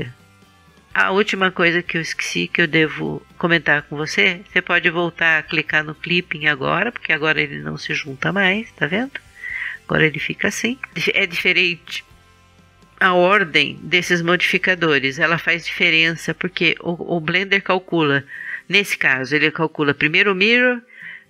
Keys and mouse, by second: 7.3 middle click, 9.8-21.2 middle drag.